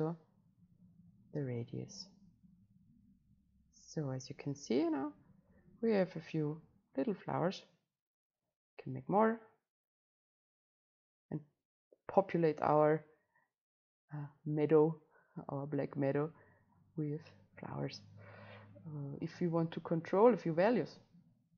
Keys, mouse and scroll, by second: 1.5-4.8 right drag, 11.0-16.5 drag, 16.5-21.5 right drag.